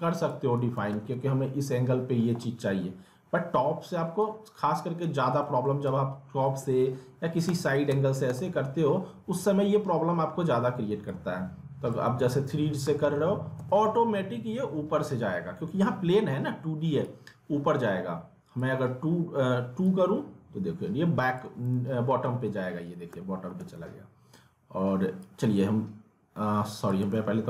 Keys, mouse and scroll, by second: 0.5 ctrl+z, 0.9 alt+w, 4.2 click, 5.4 middle click, 5.8 ctrl+z, 6.6 alt+w, 7.5 alt+w, 7.9 z, 8.3 alt+w, 8.9 scroll down 1, 10.1-11.1 scroll, 11.1 click, 12.0 w, 13.6 ctrl+z, 17.0-21.7 drag, 21.7 alt+w, 23.1 alt+w, 25.2-27.1 drag, 27.1 ctrl+z.